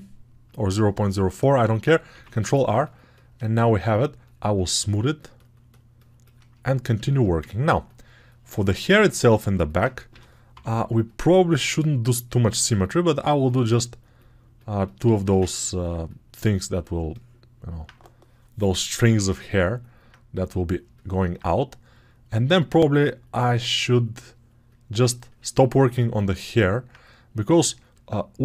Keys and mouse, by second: 2.0 ctrl+r, 5.0 shift+right click, 6.4 alt+click, 6.5 right click, 6.6-21.2 alt+shift+drag, 10.0 g, 10.4 [, 10.5 [, 21.2-22.7 right drag, 22.7-25.8 drag, 25.8-28.4 alt+right drag.